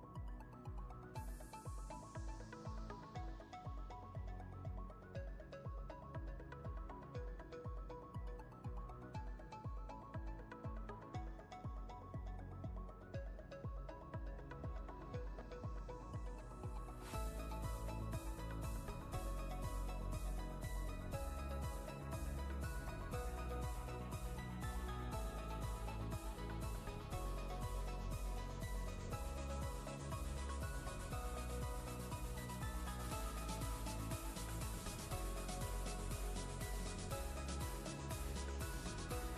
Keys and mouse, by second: 2.0-10.9 drag, 3.7-8.7 drag, 12.8-13.4 drag, 14.4-15.6 drag, 16.7-17.3 click, 21.5 right click, 26.4 click, 27.8 right click, 31.8 click, 33.2 right click.